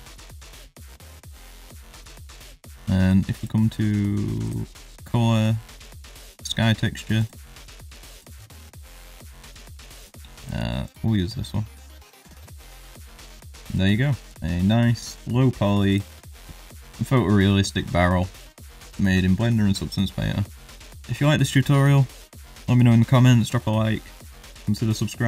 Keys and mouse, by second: 0.9 middle click, 3.4-4.4 drag, 4.9-6.4 drag, 7.2-8.2 drag, 9.1 click, 10.4-11.0 drag, 12.7 click, 13.5 middle click, 15.1 click, 15.9 click.